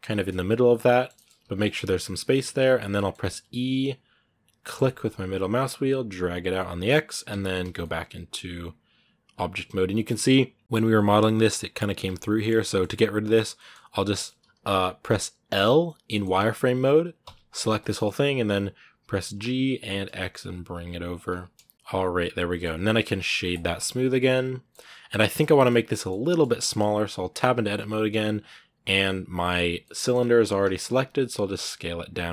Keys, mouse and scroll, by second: 0.1 scroll down 2, 0.2-1.2 middle drag, 1.2 s, 2.1-3.2 middle drag, 3.2 e, 6.4 middle click, 7.1 Tab, 7.6-9.5 middle drag, 9.5-10.6 scroll up 3, 9.7 middle click, 10.6-11.8 middle drag, 11.8 Tab, 12.3-14.3 middle drag, 14.3 z, 15.9-17.0 middle drag, 17.0 l, 17.6 middle click, 18.1 g, 21.5 scroll down 1, 21.7 middle click, 22.4 scroll up 1, 23.4 w, 23.5-24.6 middle drag, 24.6 scroll up 4, 25.1-26.9 shift+middle drag, 26.9 scroll down 1, 27.2 Tab, 29.5 scroll down 1, 29.6 middle click, 30.1 z, 30.4-30.8 scroll up 1, 30.8 s.